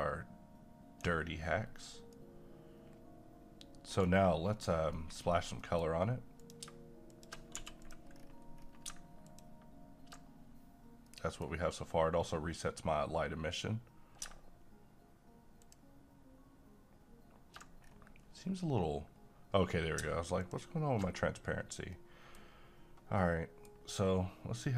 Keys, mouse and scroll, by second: 2.2-4.5 right drag, 4.5 scroll down 1, 4.9 middle click, 5.2-5.6 scroll down 1, 5.6 middle click, 6.4 click, 7.5 g, 7.8 click, 8.1-8.6 scroll up 1, 8.7 scroll up 1, 9.2 click, 11.1-15.6 middle drag, 15.6 ctrl+shift+click, 17.8 scroll down 1, 18.6-19.1 scroll up 1, 19.1 scroll down 1, 19.5-19.9 scroll up 1, 20.4 ctrl+click, 21.5-21.9 scroll down 2, 21.9-24.7 middle drag.